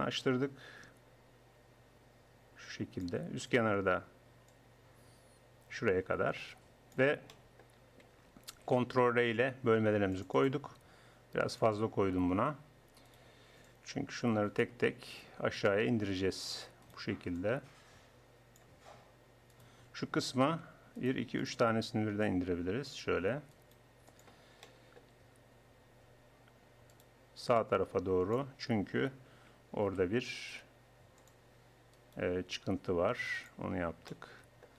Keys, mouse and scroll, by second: 0.9 click, 3.5-4.5 drag, 4.5-6.1 middle drag, 6.1 click, 7.5-8.5 middle drag, 8.5 ctrl+r, 11.6-13.1 drag, 13.5 right click, 15.4 click, 18.9 click, 19.5-22.3 drag, 24.0-27.6 drag, 29.1 click, 29.9 ctrl+r, 32.0-33.6 drag.